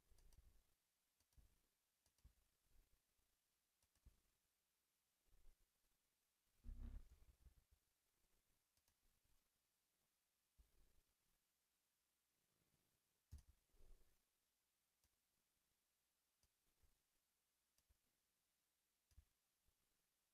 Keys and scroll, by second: 4.0 a, 7.1 t, 10.5 a.